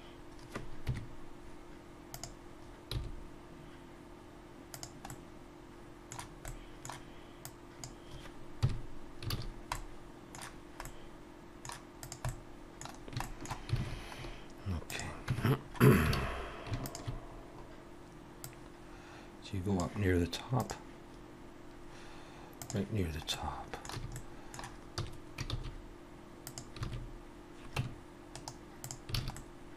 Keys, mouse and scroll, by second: 0.9 KP_3, 2.1 click, 2.9 g, 5.1 middle click, 6.5 middle click, 7.4 click, 8.6 KP_Decimal, 9.3 alt+a, 9.5-10.1 scroll down 2, 9.7 middle click, 10.5-11.2 scroll down 2, 10.8 middle click, 12.0 click, 12.3 middle click, 12.9-13.2 scroll down 3, 13.2 shift+middle click, 13.8 alt+a, 14.2-14.5 scroll up 1, 14.8 click, 14.8 scroll up 2, 15.3 Tab, 15.6-16.1 scroll up 2, 16.1 alt+a, 16.8 alt+shift+click, 17.2-17.6 scroll down 1, 18.4 click, 18.4 scroll down 3, 23.3 middle click, 24.0 a, 24.1 middle click, 25.0 s, 26.8 alt+a, 27.8 Tab, 28.3 right click, 29.1 alt+a, 29.4 middle click.